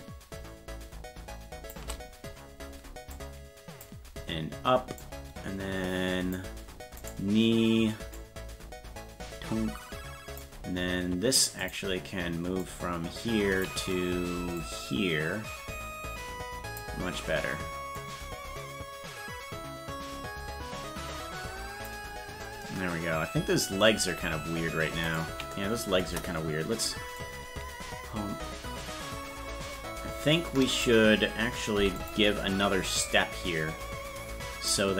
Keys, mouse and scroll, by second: 3.1 click, 5.0-6.3 drag, 7.1 right click, 8.2-10.4 drag, 11.6 click, 12.6-13.6 drag, 14.6-16.8 drag, 18.0-21.9 drag, 25.3 right click, 26.1 KP_0, 27.2-30.8 drag, 31.8 i, 33.0-34.7 drag.